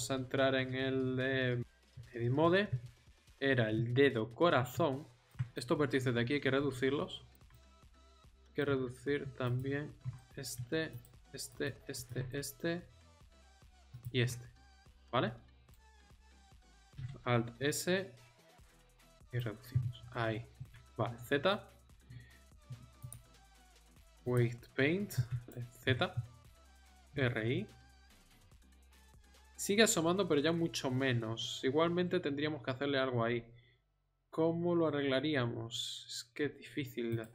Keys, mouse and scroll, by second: 5.1 middle click, 8.0 middle click, 10.4 middle click, 12.5 middle click, 13.3 ctrl+z, 16.9 alt+s, 20.5 z, 25.4 r, 25.8 z, 26.9 r.